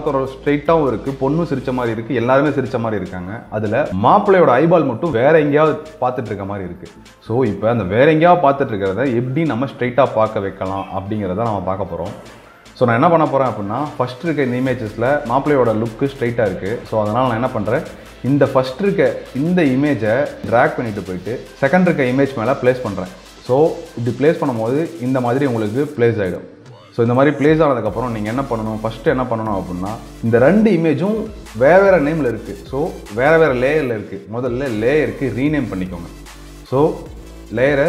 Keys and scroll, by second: 7.9 ctrl+space.